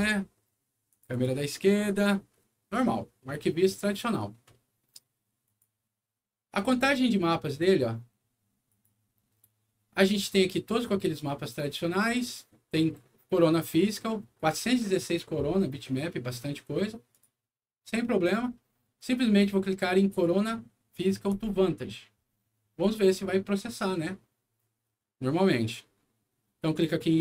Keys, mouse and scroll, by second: 0.0 c, 0.9 click, 1.1 click, 5.4 click, 7.4 click, 8.6 click, 17.1 click, 21.2 click.